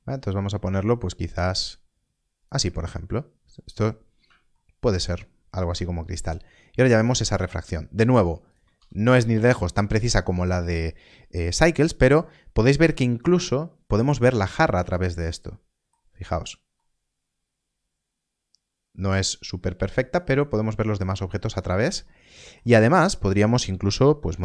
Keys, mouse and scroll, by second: 4.5 shift+middle click, 5.0 scroll down 1, 5.9 shift+middle click, 7.2 click, 8.7 alt+a, 12.3 scroll up 1, 13.0 shift+middle click, 14.9 middle click, 16.1 scroll up 1, 16.7 middle click, 22.0 shift+middle click.